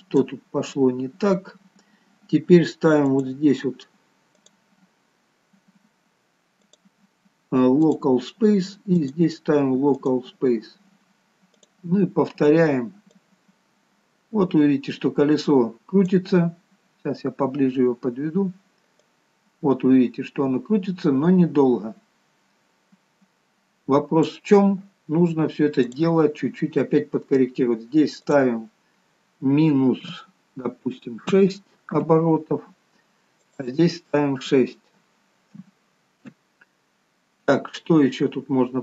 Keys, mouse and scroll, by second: 0.9-1.4 scroll down 3, 3.3-4.6 scroll down 7, 6.9 click, 13.4 click, 16.6-17.2 scroll up 6, 17.2-18.3 scroll down 3, 18.3-19.3 scroll down 1, 19.3 click, 26.1 click, 33.7 click, 38.4-38.8 scroll down 2.